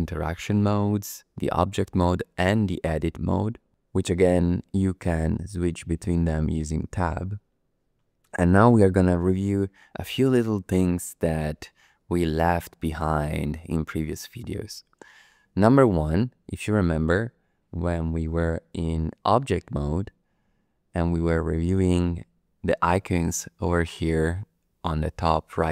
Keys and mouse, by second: 18.5 Tab.